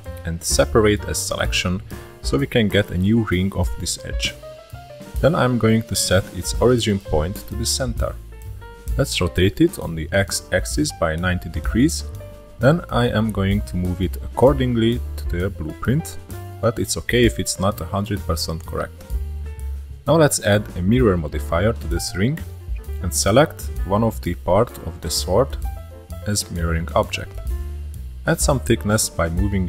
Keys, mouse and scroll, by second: 0.1 middle click, 0.7 Tab, 1.2-1.9 shift+middle drag, 1.9 click, 3.1-6.5 right drag, 6.5-7.9 shift+middle drag, 7.9 r, 9.7-10.7 shift+middle drag, 10.7-11.2 scroll up 1, 11.2 s, 12.4 click, 16.7 click, 18.5-18.9 scroll down 3, 18.9-20.2 shift+middle drag, 20.2-21.7 scroll up 1, 22.6 click, 24.7 click, 25.9-27.4 drag, 27.7 click, 29.2 click.